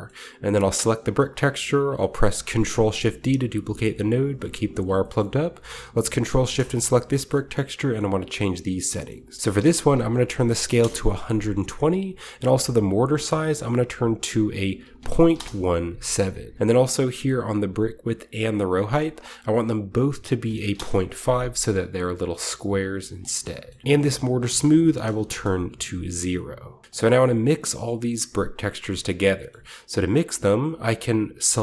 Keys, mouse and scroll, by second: 0.5-2.7 drag, 2.4 shift+d, 4.6 click, 5.0 middle click, 5.2 click, 5.3-6.3 scroll up 1, 5.4 ctrl+middle click, 6.3 ctrl+shift+click, 6.4-7.7 middle drag, 6.7-9.4 scroll up 2, 7.9-9.4 middle drag, 9.4-10.4 drag, 10.2 typing, 10.7 Return, 12.9-14.6 drag, 14.8-15.2 typing, 15.3 Return, 16.5 scroll up 1, 18.8-20.4 drag, 20.6 typing, 20.7 Return, 21.5-22.5 scroll down 1, 22.5-24.7 scroll up 2, 23.0 middle click, 24.7 click, 25.1 typing, 25.2 Return, 26.8 middle click, 26.8-27.2 scroll down 1, 26.8-29.3 drag, 27.2 g, 28.7-29.3 scroll up 1, 28.8 a, 29.5-31.4 middle drag, 31.5 click.